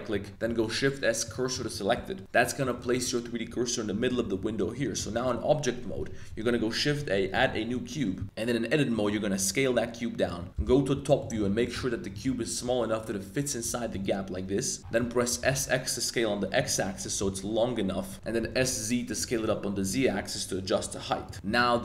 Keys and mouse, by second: 0.4 shift+s, 1.6 shift+drag, 1.9 Tab, 2.1 drag, 2.7 z, 2.9 shift+click, 6.3 shift+a, 7.7 click, 8.2 Tab, 8.9 s, 10.2 click, 10.5 KP_7, 11.0 z, 11.2 shift+click, 12.3 s, 13.9 click, 14.8 s, 15.4 s, 17.2 s, 17.3 x, 18.1 middle click, 18.4 s, 18.6 z, 19.9 s, 20.0 z, 21.3 click, 21.3 middle drag, 21.3 z, 21.4 Tab, 21.5 middle drag.